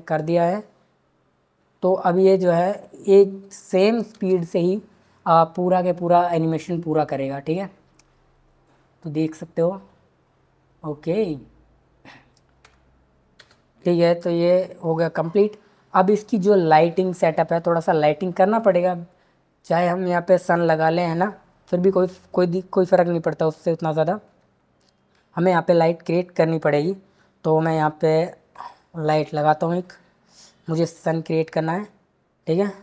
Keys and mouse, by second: 0.2 click, 2.2 click, 3.5 click, 4.1 space, 13.3 space, 14.3 shift+Left, 28.1 shift+a.